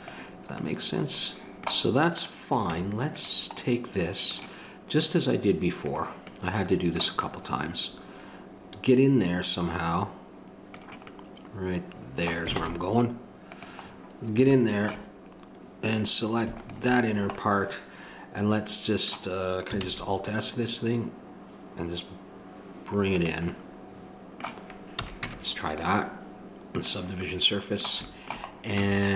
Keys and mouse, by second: 2.1 click, 2.7 Tab, 5.8 click, 6.3-7.7 middle drag, 12.6 ctrl+Tab, 16.5-17.6 drag, 17.6-19.0 middle drag, 19.8 alt+s, 23.5-25.0 middle drag, 25.0 a, 25.2 Tab, 26.7-28.1 drag, 28.8 Tab.